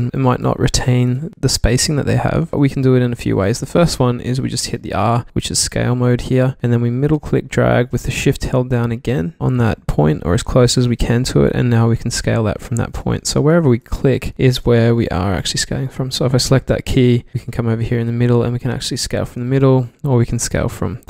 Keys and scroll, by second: 0.0 super+z, 1.9 super+z, 3.4 super+z, 5.2 r, 13.2 super+z, 17.3 r, 19.5 super+z.